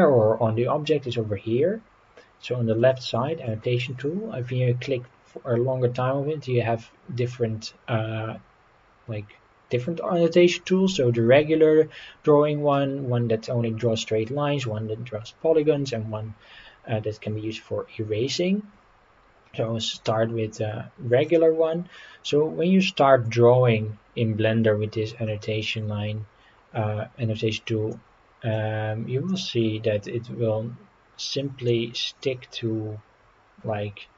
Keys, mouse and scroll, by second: 2.8 click, 3.4-21.4 drag, 27.9-29.4 drag, 31.7-34.1 middle drag.